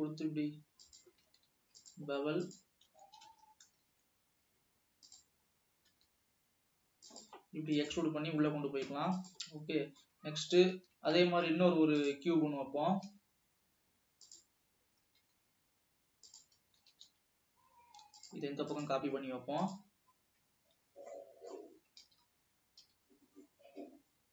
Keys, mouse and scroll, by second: 1.5 alt+a, 1.9 click, 2.5 click, 3.1 e, 3.9 s, 5.5-5.9 scroll up 2, 6.1 e, 9.4 e, 9.9 scroll down 1, 10.3-10.9 middle drag, 10.9 alt+a, 11.5 shift+a, 12.4-13.0 scroll down 3, 13.4 s, 14.8 scroll up 1, 15.3 s, 17.1 g, 20.0 g, 20.4 scroll up 2, 21.3 middle click, 22.1 s.